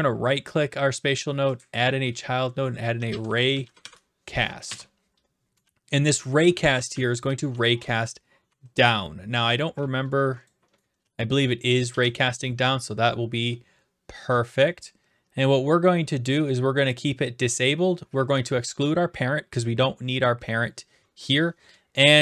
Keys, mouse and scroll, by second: 0.0-1.1 right drag, 1.6-2.7 drag, 2.7-4.3 typing, 4.6 Return, 5.4-8.5 typing, 10.5 click, 11.0 d, 11.7 right click, 11.9 ctrl+z.